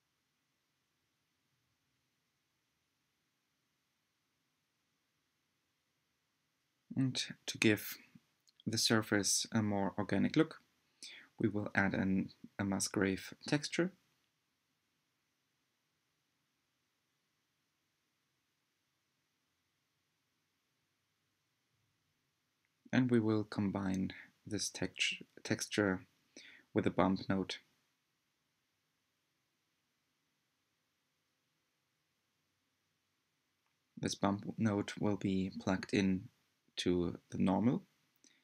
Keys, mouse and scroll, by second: 15.5 ctrl+shift+click, 19.7-38.4 drag.